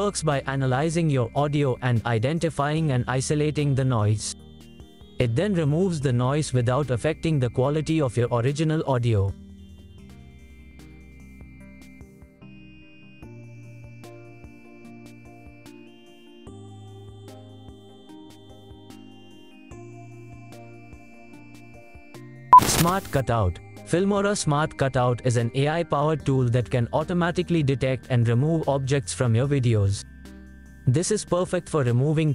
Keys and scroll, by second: 7.4 space, 9.0 space, 15.4 space.